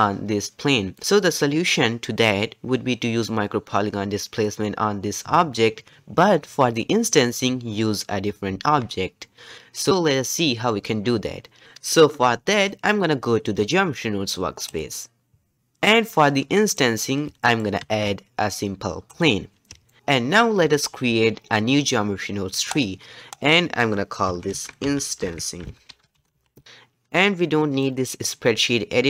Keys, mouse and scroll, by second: 14.8 click, 16.3-17.4 scroll down 6, 16.5 middle click, 17.4-18.1 shift+middle drag, 18.1 shift+a, 19.9-22.8 shift+middle drag, 22.8-26.5 drag, 26.7-29.0 drag.